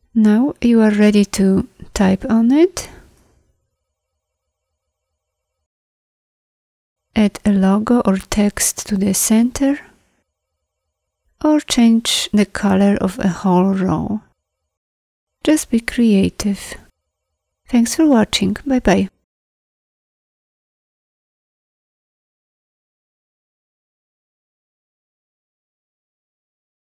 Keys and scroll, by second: 22.7 ctrl+c, 26.0 ctrl+t.